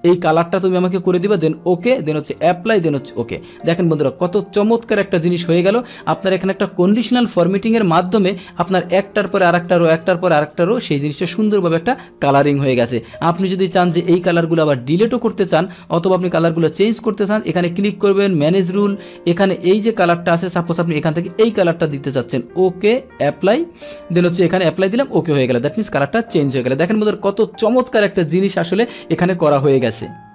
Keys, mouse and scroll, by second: 1.3 click, 2.3 click, 3.1 click, 3.6 click, 6.0 click, 8.1 click, 9.0 click, 9.3 click, 9.7 click, 10.1 click, 10.4 click, 13.9 click, 15.2 click, 16.2 click, 16.9 click, 18.3 click, 18.5 click, 20.0 click, 21.3 click, 22.3 click, 23.4 click, 24.4 click, 24.8 click, 25.5 click.